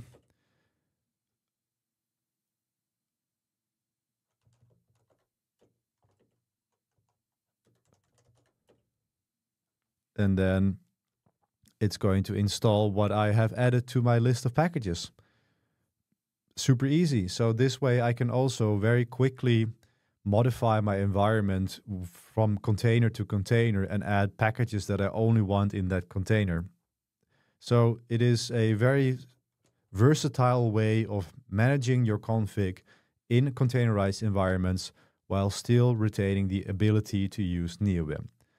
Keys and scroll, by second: 0.2 Return, 4.2-8.8 typing, 5.7 Return, 29.6 ctrl+b, 29.9 3, 35.8-36.7 typing.